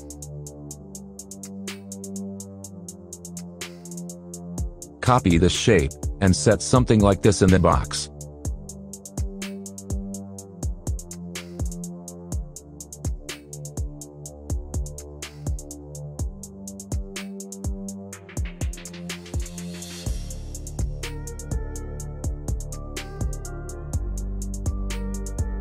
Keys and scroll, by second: 2.2 ctrl+z.